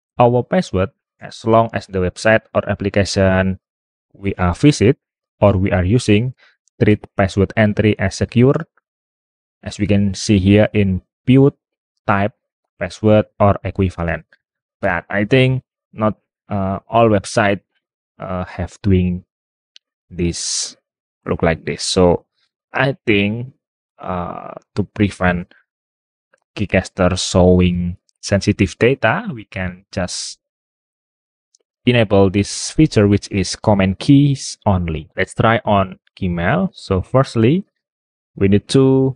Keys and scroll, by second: 25.3 super+Tab, 36.4 super+Tab.